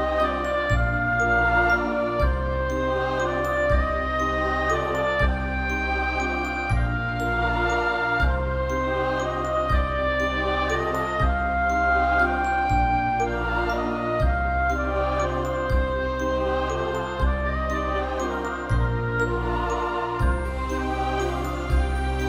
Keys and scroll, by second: 1.9 ctrl+alt+shift+e.